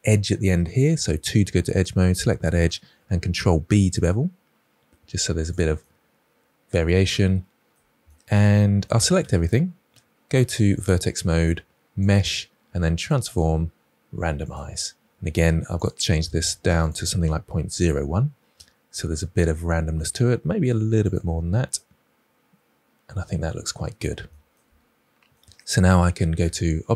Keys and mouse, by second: 1.7 click, 3.2 ctrl+b, 5.7-7.6 middle drag, 8.6 middle click, 9.1 a, 12.1-14.5 drag, 15.9-18.4 drag, 18.5-19.7 middle drag, 20.9 click, 21.9-23.4 middle drag, 26.3 Tab.